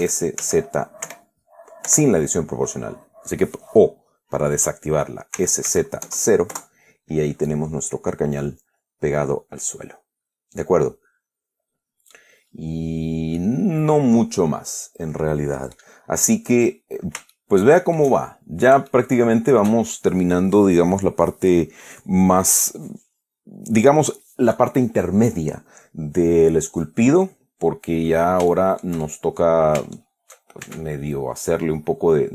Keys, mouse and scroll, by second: 0.3 s, 0.7 z, 2.2 o, 5.7 s, 6.0 z, 6.3 KP_0, 6.8 KP_Enter, 7.8-12.6 middle drag, 12.8 scroll up 1, 13.1-13.6 scroll down 1, 13.7-16.2 middle drag, 16.3 scroll up 1, 16.5-17.1 scroll down 1, 17.6-19.0 shift+middle drag, 19.0 shift+click, 20.1 shift+click, 27.7 scroll down 1, 28.1-28.7 scroll up 1, 28.8 shift+click, 29.9-30.2 shift+scroll up 1, 30.2 shift+click, 30.9 Tab.